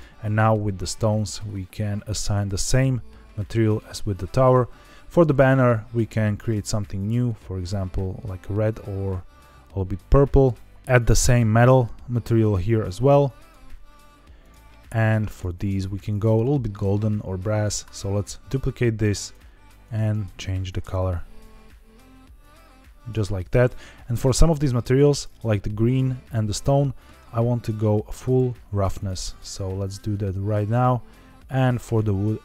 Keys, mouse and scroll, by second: 1.1-2.4 drag, 3.3 middle click, 4.4 click, 5.2 click, 6.3-7.6 drag, 10.7 click, 11.5 click, 12.3-13.4 drag, 14.3 click, 15.2 click, 17.7 click, 19.1 click, 23.9 click, 25.0 click, 27.8 click, 28.9 click, 30.0 click, 31.6 click.